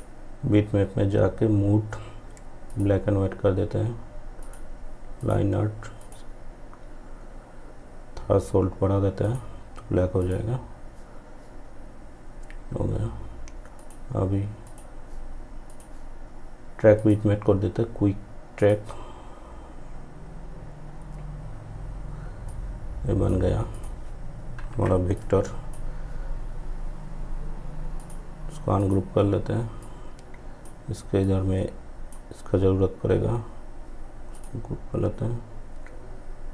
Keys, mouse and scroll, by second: 1.7 click, 8.3 click, 12.8 click, 16.0 click, 21.5-33.3 drag.